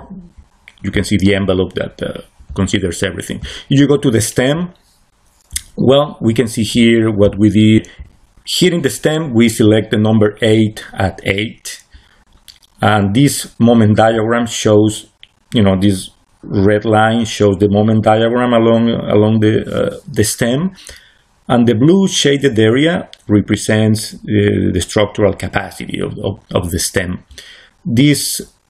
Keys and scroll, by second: 5.5 c.